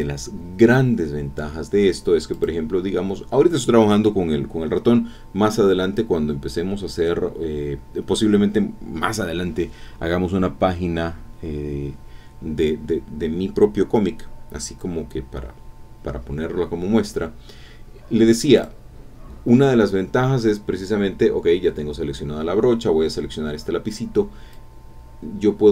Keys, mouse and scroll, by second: 2.3 click, 18.6 click, 24.5-25.7 drag.